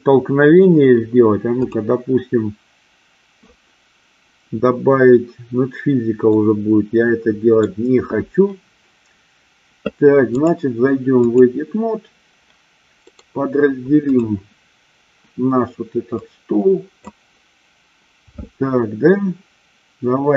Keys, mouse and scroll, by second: 6.5-7.8 middle drag, 10.5-11.6 drag, 13.1-14.4 right drag, 16.2 click.